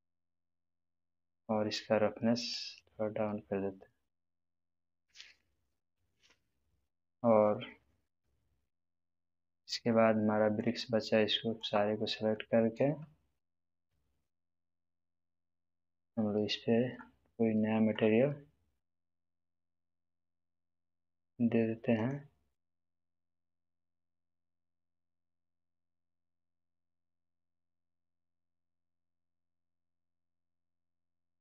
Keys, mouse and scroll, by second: 1.3-2.5 scroll down 1, 2.5-4.4 drag, 4.7-5.9 middle drag, 10.6-11.8 drag, 12.3-13.0 middle drag, 14.2 shift+click, 15.5-16.1 middle drag, 19.4-27.6 drag, 28.4-29.9 middle drag.